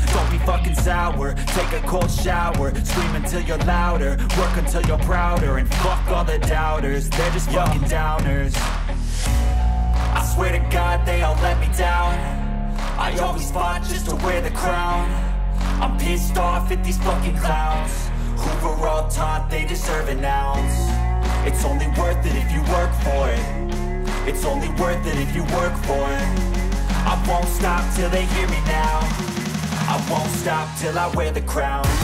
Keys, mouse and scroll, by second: 2.7 click, 6.5 click, 6.7-8.7 scroll, 9.3 click, 10.3 click, 12.9 click, 13.2 middle click, 14.6 click, 16.2 3, 17.0 click, 20.9 click, 21.4 click, 22.6-23.0 typing, 24.4 Return, 26.7 click, 28.9 click, 29.9 typing, 30.7 Return, 31.2 middle click.